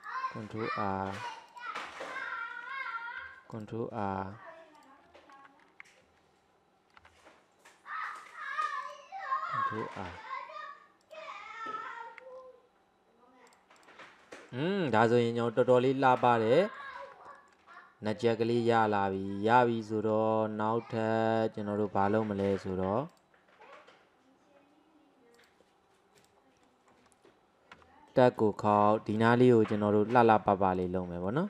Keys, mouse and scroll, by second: 1.9-3.2 middle drag, 3.2 ctrl+r, 7.0 ctrl+r, 12.4-13.5 scroll down 3, 13.5 click, 14.3 middle click, 14.7-15.0 scroll down 3, 15.0-15.7 middle drag, 15.7 right click, 16.5-16.9 middle drag, 16.9-17.3 scroll down 1, 17.3-24.7 shift+middle drag, 26.2 click, 26.7-27.8 middle drag, 27.8 Tab, 28.1-29.1 middle drag, 29.1 click, 29.6 scroll up 1, 30.1 click, 30.8 alt+click, 31.3-31.4 middle drag.